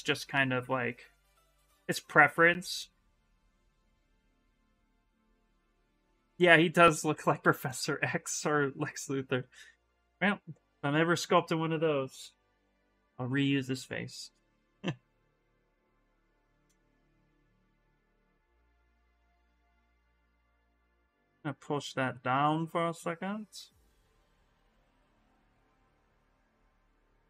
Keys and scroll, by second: 6.4 s, 8.6 s, 12.0 b, 12.4 v, 13.6 s.